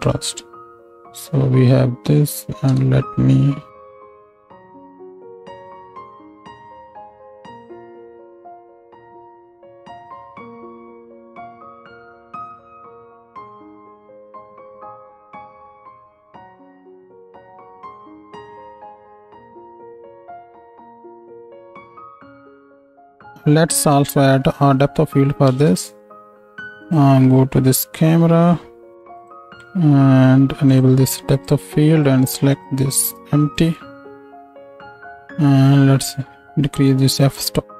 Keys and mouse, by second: 0.9 ctrl+space, 2.7 n, 4.0 click, 4.3-9.2 right drag, 9.2 click, 9.6 shift+right click, 9.8 click, 10.1 middle click, 10.4-12.1 ctrl+drag, 10.4 n, 10.5 ctrl+space, 12.1 middle click, 12.2-13.5 drag, 13.5 middle click, 14.4 click, 15.1-17.8 middle drag, 17.8-19.8 shift+drag, 18.6 ctrl+space, 19.5 z, 19.8-25.2 middle drag, 20.3 s, 25.4 ctrl+middle click, 25.5 ctrl+space, 26.0 middle click, 26.8 click, 27.7 middle click, 29.2 click, 35.6-37.7 drag.